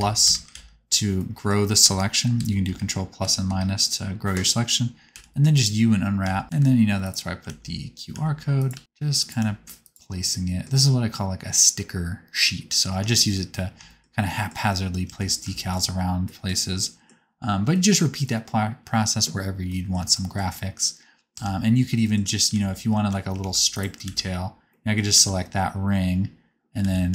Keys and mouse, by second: 0.2 ctrl+KP_Add, 0.5 alt+z, 2.2 ctrl+KP_Subtract, 2.3 ctrl+KP_Subtract, 2.7 ctrl+KP_Add, 3.1 ctrl+KP_Subtract, 3.4 ctrl+KP_Add, 5.0 u, 5.6 click, 6.1 a, 6.4 s, 6.4 g, 7.4 alt+z, 8.0 s, 8.7 g, 9.3 s, 15.0 Tab, 16.9-21.4 middle drag, 21.4 Tab, 21.8 shift+middle click, 22.6 alt+z, 22.8 alt+z, 23.3 3, 24.0 alt+z, 25.2 alt+z, 26.7 a, 27.0 s.